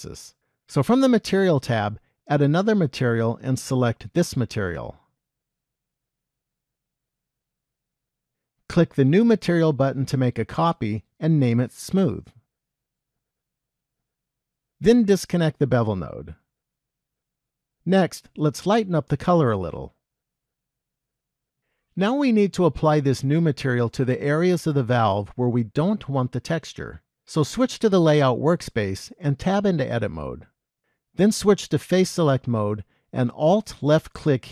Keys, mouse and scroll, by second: 28.0 click, 29.7 Tab, 31.7 click.